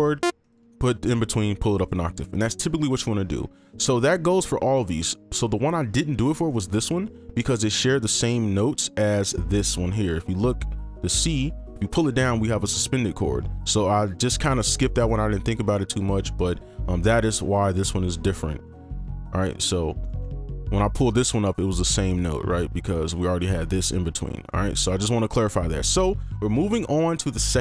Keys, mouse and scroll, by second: 0.5 ctrl+click, 3.3 right click, 5.0 ctrl+click, 9.1 ctrl+2, 9.3 ctrl+click, 10.6 ctrl+click, 11.5 ctrl+2, 11.6 ctrl+Down, 16.0 ctrl+Up, 16.5 ctrl+Down, 16.7 ctrl+Down, 17.3 ctrl+Down, 17.3 ctrl+Up, 17.6 ctrl+Up, 17.9 scroll up 1, 18.7 ctrl+Down, 19.4 ctrl+Up, 19.6 ctrl+Down, 20.0 right click, 20.4 ctrl+click, 24.4 right click.